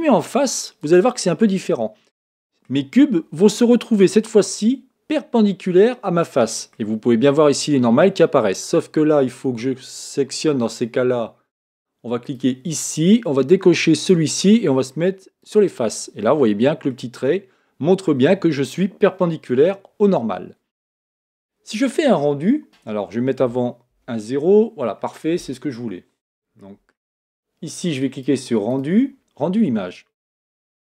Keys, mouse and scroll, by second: 0.8 click, 1.5-3.5 middle drag, 3.5-4.0 scroll down 3, 4.0-6.8 middle drag, 6.8-8.9 scroll up 1, 8.9-9.8 scroll up 1, 12.2-15.2 drag, 16.2-20.6 middle drag, 24.1 KP_0, 26.6-28.1 middle drag, 28.1-30.9 drag.